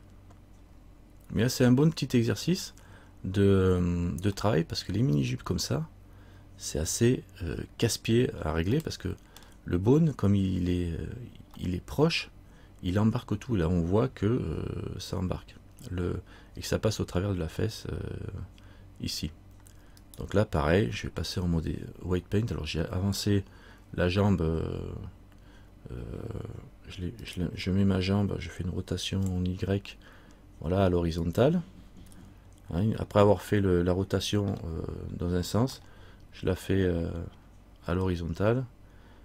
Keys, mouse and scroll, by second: 4.6 middle click, 8.1-8.8 scroll up 3, 8.9 middle click, 11.8 middle click, 20.2 right click, 27.4 right click, 28.9 r, 33.6 middle click, 34.6 middle click, 36.0 middle click.